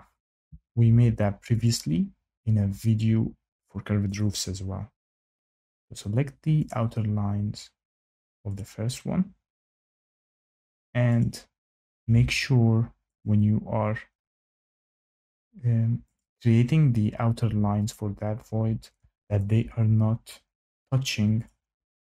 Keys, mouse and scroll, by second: 1.6 click, 3.0-3.5 scroll, 4.1 click, 5.5 click, 6.6 click, 6.9 scroll, 8.5 click, 9.7 click, 10.1 scroll, 11.1 click, 13.1 click, 14.3 click, 14.3-14.7 scroll, 16.1 click, 17.8 click, 21.4 click, 21.7 Escape.